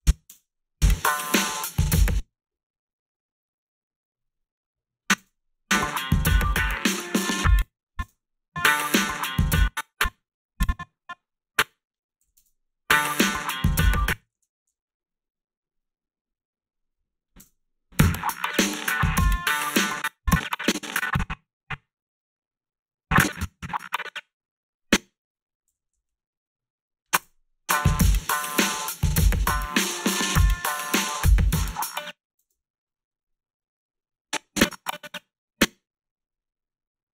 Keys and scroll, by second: 0.3 space, 1.9 space, 5.2 space, 7.3 space, 8.0 space, 9.4 space, 12.2 g, 12.3 space, 13.8 space, 14.3 ctrl+z, 17.4 space, 19.7 space, 25.7 g, 27.2 space, 32.4 space.